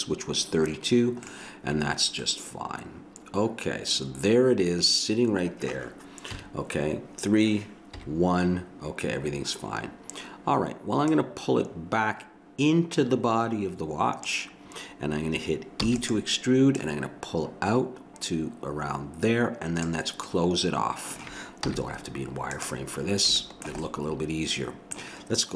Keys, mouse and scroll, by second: 1.3 middle click, 2.5 middle click, 6.3 KP_3, 8.0 KP_1, 12.7 click, 15.8 e, 16.7 click, 20.3-21.7 middle drag, 21.7 z.